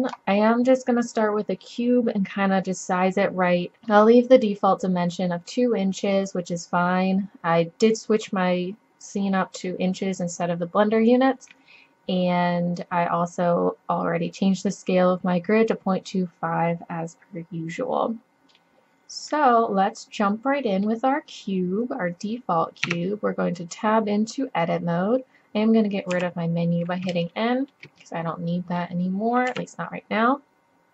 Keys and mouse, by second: 18.6-20.7 middle drag, 22.9 Tab, 23.1-26.0 middle drag, 26.1 n, 29.5 KP_1.